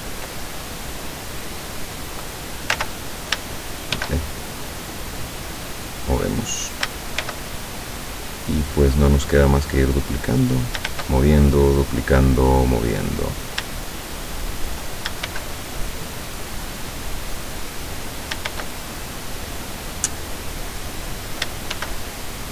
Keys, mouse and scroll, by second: 1.7-2.3 drag, 2.8 ctrl+z, 4.0 shift+d, 6.6 click, 7.3 shift+d, 10.5 click, 10.9 shift+d, 13.2 click, 13.9-14.9 shift+drag, 15.3 shift+d, 18.2 click, 18.6 shift+d, 21.0 click, 21.8 shift+d.